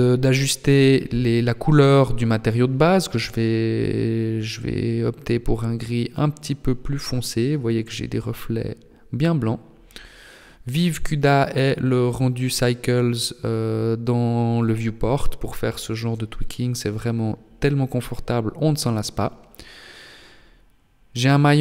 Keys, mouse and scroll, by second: 12.4 click, 16.8 right click, 18.6 r, 21.3 r.